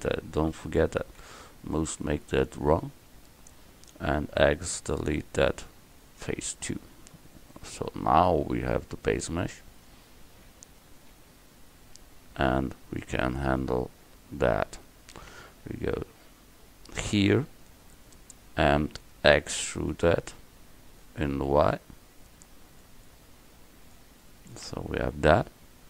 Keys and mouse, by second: 0.6 KP_1, 2.8 Tab, 4.5 x, 9.8-11.8 right drag, 12.5 KP_1, 15.8 KP_5, 19.6 e, 25.5 KP_1.